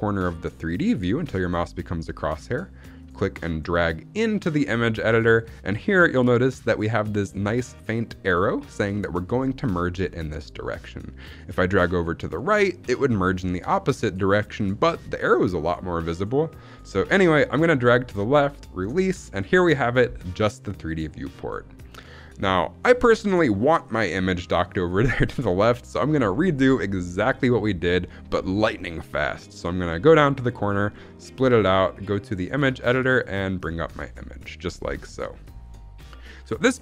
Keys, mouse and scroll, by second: 2.9-18.7 drag, 30.5 click, 31.8 click, 33.0 click, 35.0-36.1 scroll down 1.